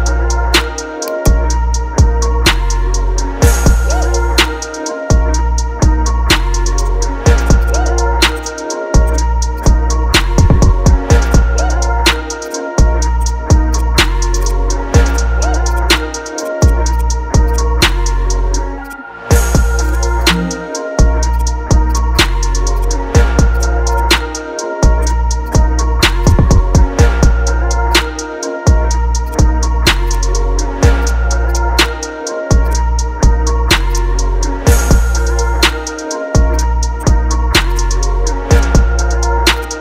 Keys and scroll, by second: 35.4 ctrl+d.